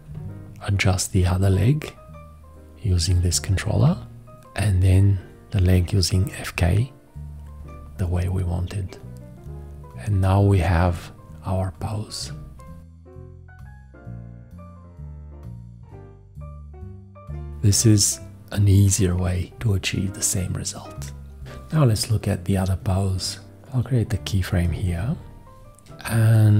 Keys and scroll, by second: 24.7 x.